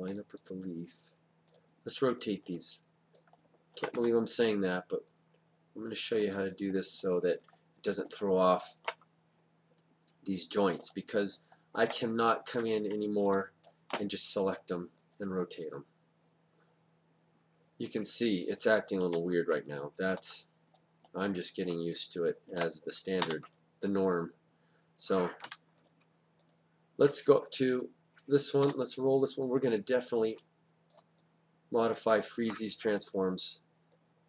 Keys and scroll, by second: 3.9 w, 12.4 F8, 19.0 w, 23.2 w, 25.4 F8, 28.6 e, 33.0 Down.